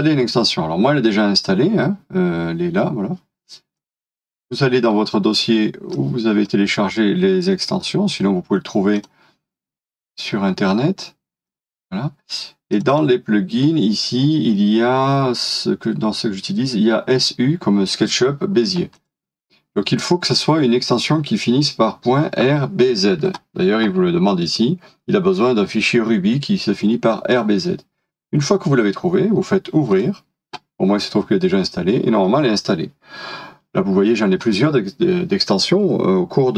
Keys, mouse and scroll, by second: 11.6 double click.